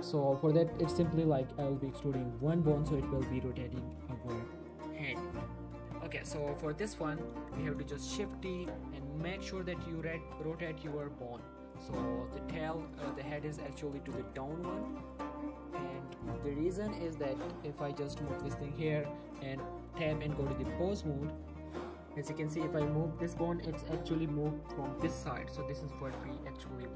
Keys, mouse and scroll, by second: 0.2 click, 2.5 click, 3.2 click, 4.0-4.8 middle click, 6.1 shift+middle click, 6.3 shift+scroll up 1, 6.8 click, 7.5 shift+scroll up 1, 8.1 shift+d, 8.6 click, 9.3 r, 10.9 click, 11.2 g, 11.7 click, 12.0 scroll up 1, 12.3 click, 12.5 g, 12.8 right click, 13.0 click, 13.2 g, 13.6 right click, 14.1 click, 14.2 g, 14.8 click, 15.0 shift+middle click, 15.6 click, 15.8 shift+middle click, 16.2 click, 16.4 g, 16.8 right click, 17.1 click, 17.3 g, 18.2 click, 18.8 Tab, 20.1 Tab, 20.5 click, 20.6 Tab, 21.6 click, 22.3 scroll down 1, 22.5 r, 23.3 right click, 23.9 right click, 24.2 scroll up 1, 24.5 scroll down 1, 24.6-25.3 scroll up 1, 25.3 r, 26.2 right click, 26.5 Tab.